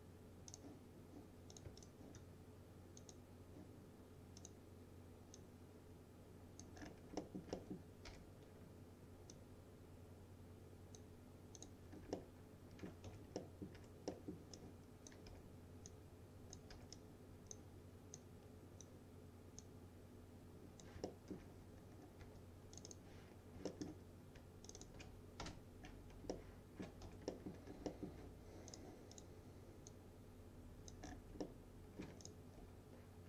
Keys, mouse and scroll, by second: 0.6 click, 1.9-7.0 shift+drag, 6.9 scroll down 1, 7.3 alt+middle click, 8.1 p, 9.4-11.2 drag, 11.9 scroll up 1, 12.2-13.1 alt+middle click, 13.1 F3, 13.4 middle click, 13.8 1, 14.2 middle click, 14.6-15.2 click, 15.3 w, 15.9-16.9 click, 16.8 w, 17.0-17.6 drag, 20.0-20.9 click, 21.1 alt+middle click, 21.9 scroll up 2, 22.3 2, 22.8 click, 23.7 alt+scroll, 24.1 scroll up 1, 24.7 ctrl+click, 25.5 BackSpace, 25.9-26.3 scroll down 1, 26.4-27.0 alt+middle click, 27.1 F3, 27.4 middle click, 27.6 scroll down 1, 27.9 alt+middle click, 28.8 click, 30.3-31.2 click, 31.1 scroll down 1, 31.8-32.1 alt+middle click, 32.3 click, 32.7 F4.